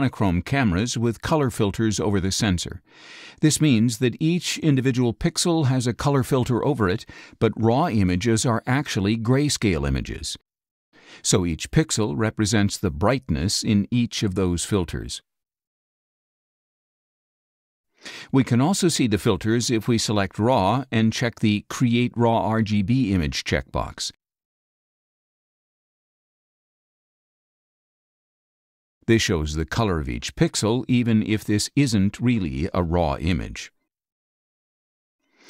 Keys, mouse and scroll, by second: 0.7 middle click, 1.3 middle click, 1.3 scroll down 2, 2.6 click, 3.4 space, 3.6 click, 5.1 click, 5.1 scroll down 1, 5.8 scroll down 2, 6.3 middle click, 6.4 scroll down 2, 7.6-8.9 scroll down 10, 8.2 middle click, 10.1 middle click, 10.1-10.6 scroll down 2, 10.4 middle click, 11.0 middle click, 11.1-13.6 drag, 14.0-15.3 drag, 17.1 click, 21.7 click, 24.6 click, 25.6 click, 26.6 click, 28.6 click, 29.2 ctrl+a, 29.9 middle click, 29.9-30.8 scroll down 4, 30.6 middle click, 30.8 space, 30.9 click, 31.9 middle click, 32.0-32.6 scroll up 5, 32.8 click, 32.8 space, 33.6 click, 34.2 click.